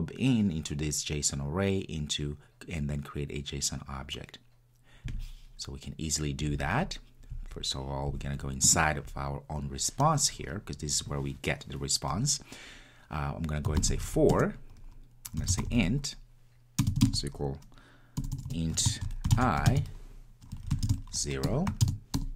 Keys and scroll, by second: 14.3 Return.